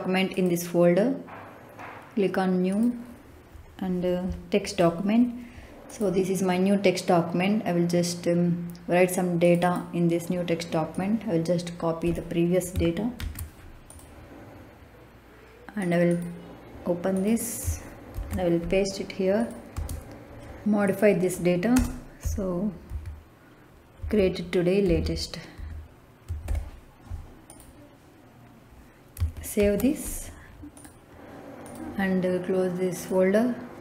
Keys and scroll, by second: 13.1 ctrl+c, 18.0 ctrl+v, 19.6 space, 21.6 space, 22.1 l, 22.8 a, 23.9-26.4 typing, 29.5 ctrl+s.